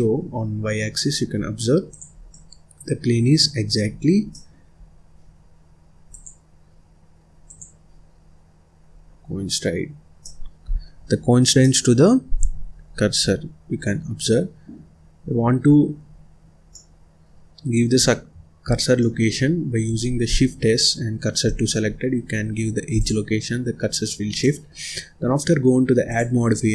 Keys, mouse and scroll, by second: 1.4-1.8 scroll down 2, 1.8 click, 2.2-3.8 middle drag, 3.8-4.2 scroll down 7, 4.2 middle click, 4.7-6.1 scroll up 2, 6.1-8.2 drag, 8.2-8.8 scroll down 1, 8.8-10.2 scroll up 4, 10.2 middle click, 11.1-11.6 scroll up 1, 11.6-12.7 middle drag, 12.7-13.2 scroll down 1, 13.2-13.8 scroll up 1, 13.8-15.1 middle drag, 15.1-15.6 scroll up 1, 15.6-16.0 scroll down 1, 16.0-16.6 scroll up 1, 16.6 scroll down 1, 16.7-18.0 middle drag, 18.0-18.6 scroll up 2, 18.6-19.0 scroll down 1, 19.0-20.3 middle drag, 20.3 shift+s, 22.2-22.6 scroll up 1, 22.6 scroll down 1, 22.9 click, 23.4-23.8 scroll up 2, 23.8 scroll down 2, 24.3 middle click, 24.8-26.0 scroll up 2, 26.0 click.